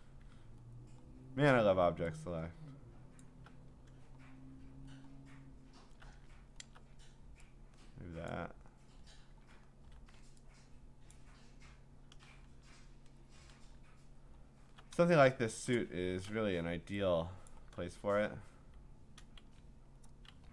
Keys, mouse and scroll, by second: 0.5-2.3 scroll, 3.2 alt+click, 4.2-5.2 scroll, 6.6 scroll, 8.3 alt+click, 9.8 scroll, 11.1 alt+click, 12.4-13.7 scroll, 13.7 scroll down 3, 14.2 scroll down 3, 14.3-14.9 scroll up 8, 15.6-16.4 scroll, 15.7 click, 17.5 shift+click, 19.4 ctrl+z.